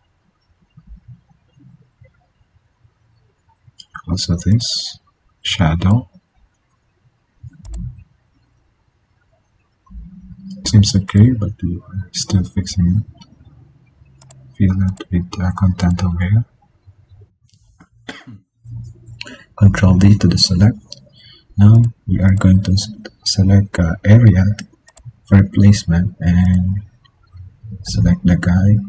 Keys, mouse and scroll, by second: 18.6 ctrl+d, 23.5 click, 23.7 alt+click.